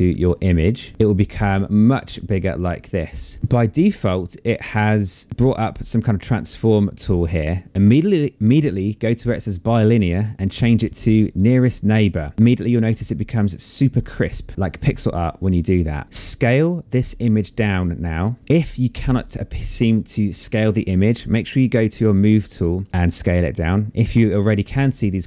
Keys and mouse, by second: 8.3 click, 10.4 click, 16.1 click, 18.3 shift+click.